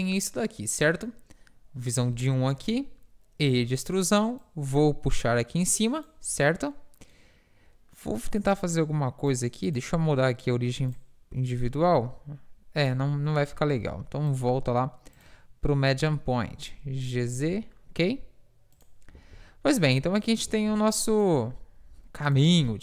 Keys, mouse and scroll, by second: 2.6 KP_1, 3.5 e, 4.5-5.8 drag, 8.5 click, 9.7 click, 11.6 s, 13.9 ctrl+z, 14.4 click, 17.1 g, 19.2 Tab, 20.5 Tab.